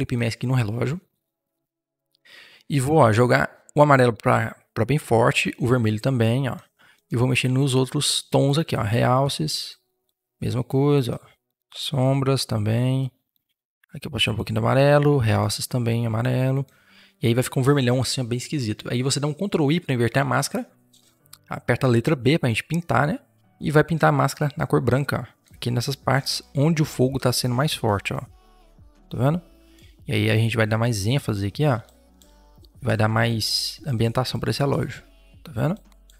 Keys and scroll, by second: 17.5 Return, 19.9 ctrl+i, 21.7 b.